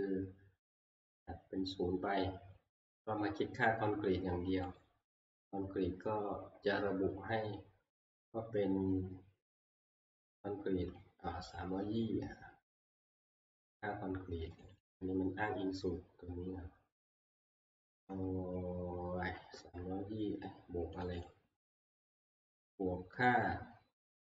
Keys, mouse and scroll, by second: 6.6 middle click, 6.6 scroll, 7.2 scroll, 11.0 click, 14.7 click, 14.8 click, 16.5 scroll, 19.2 Escape, 21.1 click, 21.3 click.